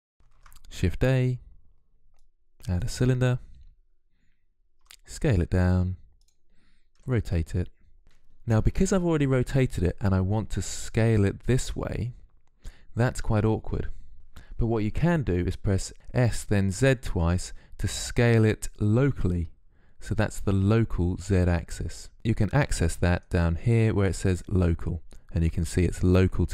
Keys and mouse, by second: 0.2 shift+a, 4.6 s, 6.8 r, 15.9 s, 22.9-26.5 drag.